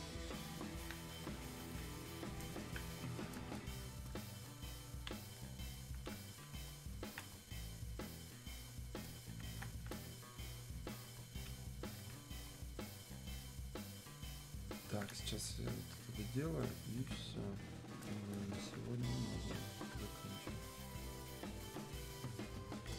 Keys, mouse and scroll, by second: 3.7 ctrl+shift+Num_Lock, 4.5 ctrl+click, 10.6-17.1 alt+drag, 18.5-22.9 alt+drag.